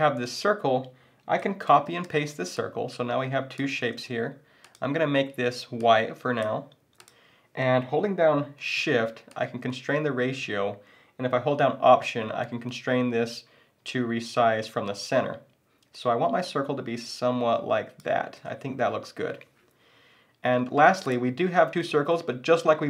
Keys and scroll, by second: 1.7 super+c, 2.0 super+v, 3.8 super+z.